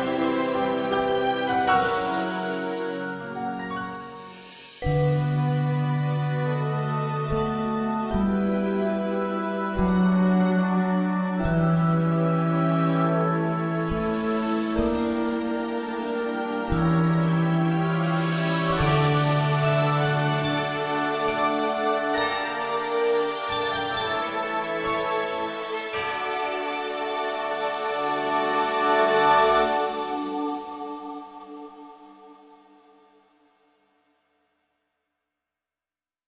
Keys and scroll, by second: 1.2 g, 2.9 g, 4.9 g, 6.7 g, 9.1 g, 11.9 a, 14.0 b, 14.7 s, 15.1 g, 21.7 a, 23.7 Tab.